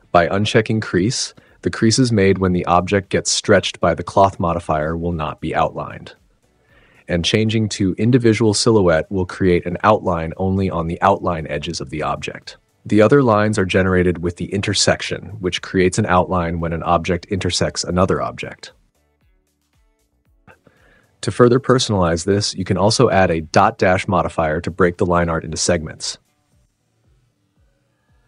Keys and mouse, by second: 14.0 space, 16.9 g, 19.6 space, 20.2 super+z, 20.4 space, 20.4 n, 20.5 space, 23.1 click, 23.3-23.8 drag, 25.5 click.